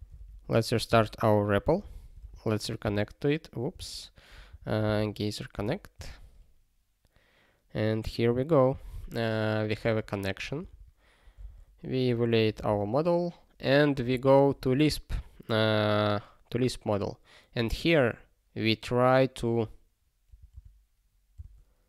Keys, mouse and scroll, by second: 1.7 super+o, 2.3 alt+x, 2.8 Return, 3.8 alt+x, 9.8 super+o, 12.6 super+b.